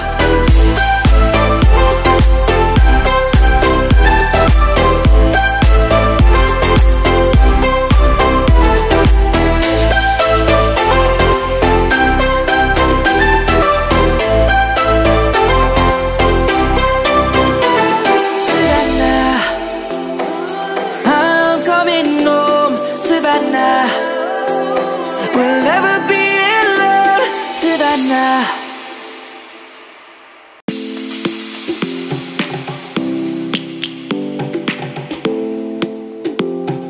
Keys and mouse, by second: 6.1 middle click, 11.1 shift+middle click, 12.1 middle click, 13.7 ctrl+1, 17.8 ctrl+1, 19.2 click, 19.6 Tab, 20.7 Tab, 21.6 click, 24.4 shift+s, 26.0 shift+click, 26.5 shift+s, 27.2 shift+click, 28.3 shift+s, 29.0 shift+click, 29.1 click, 31.1 Tab, 31.7 shift+a, 32.5 click.